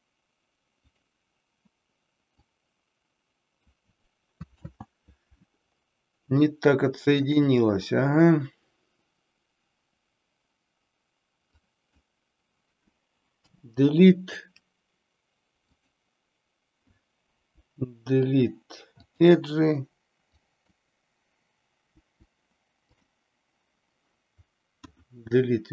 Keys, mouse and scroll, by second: 2.5-3.8 drag, 4.5 ctrl+z, 6.4 shift+middle click, 11.5 click, 13.3 Delete, 17.4 Delete, 20.3 click, 21.9 Delete, 24.8 KP_1.